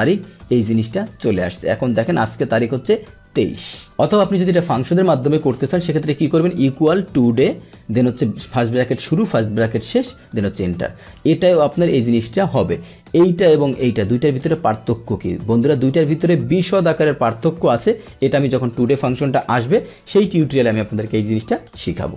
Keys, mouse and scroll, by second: 3.7 click, 7.5 Tab, 9.7 ctrl+Return, 13.1 click, 13.6 click, 14.3 click, 14.9 click, 15.9-18.1 drag.